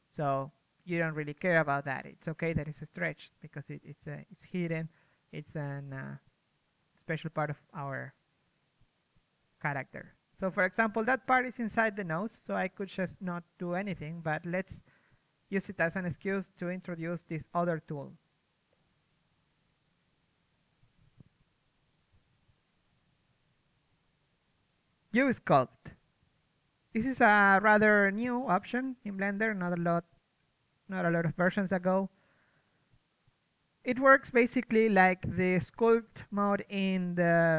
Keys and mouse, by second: 0.4 KP_1, 4.1 KP_3, 5.0 z, 5.7 z, 8.3 z, 8.6 KP_3, 9.1 z, 12.3 z, 12.8 z, 13.2 middle click, 14.3 KP_3, 15.3 a, 21.1 middle click, 21.9 z, 27.9-29.0 middle drag, 33.4-36.8 middle drag, 33.9 a.